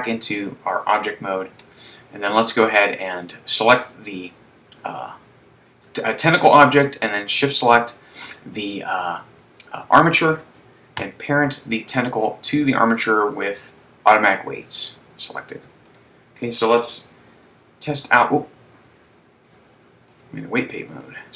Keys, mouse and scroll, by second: 2.9 right click, 7.6 shift+right click, 11.2 ctrl+p, 15.9 right click, 17.6 ctrl+Tab, 20.2 click, 21.1 click.